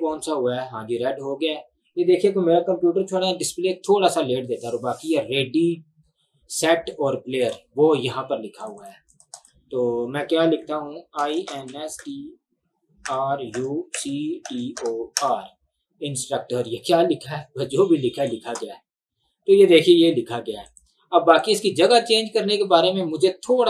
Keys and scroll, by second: 10.9-15.7 typing.